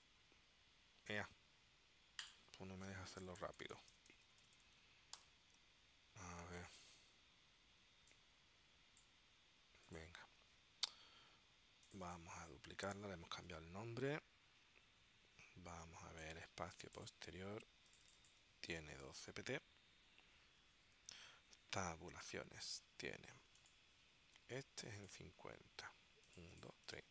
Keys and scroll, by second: 3.4 BackSpace, 5.3 shift+j, 18.6-19.9 typing, 21.6 Tab.